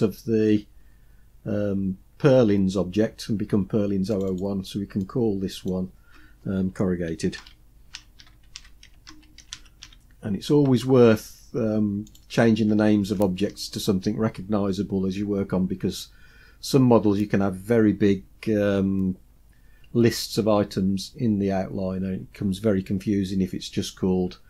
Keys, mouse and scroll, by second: 4.2 click, 4.3-12.2 drag, 8.4 r.